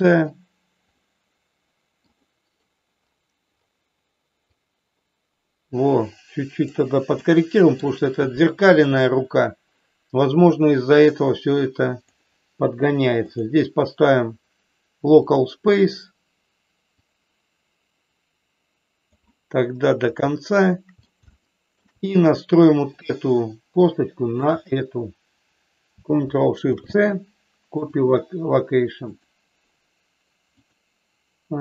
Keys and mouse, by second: 0.9-2.0 middle drag, 4.4-6.7 drag, 7.2 middle click, 10.8-12.0 drag, 13.2-15.5 drag, 17.0-19.0 drag, 20.3 shift+middle click, 21.4 shift+middle click, 22.9 click, 24.2 shift+click, 29.0 ctrl+shift+click, 30.5-31.6 drag.